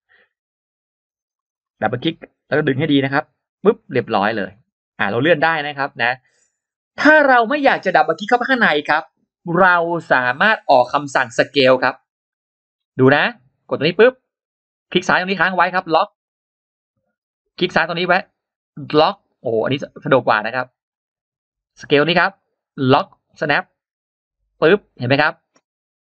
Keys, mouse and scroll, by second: 1.2 click, 1.4 click, 2.5-3.6 drag, 3.9 click, 4.2 scroll down 2, 5.1 click, 5.4-5.7 scroll up 2, 12.0-12.3 scroll up 2, 12.6-12.9 scroll down 2, 13.4 click, 14.9-16.5 drag, 17.4-18.8 drag, 19.3 click, 19.5-19.8 scroll down 2, 20.1-20.4 scroll up 2, 22.2-24.8 drag, 25.0-25.3 scroll down 2, 25.6-25.9 scroll up 2.